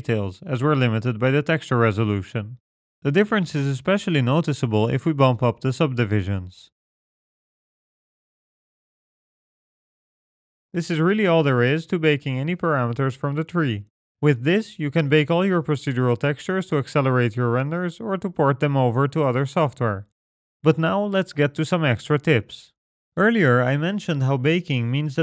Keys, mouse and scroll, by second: 0.4 click, 3.9 click, 6.9-7.6 scroll down 9, 7.4 middle click, 7.8-8.5 scroll up 11, 8.1 middle click, 8.8 scroll down 1, 12.9 scroll up 3, 14.7-16.0 scroll down 1, 16.0-17.1 scroll down 2, 17.1-19.3 scroll down 1.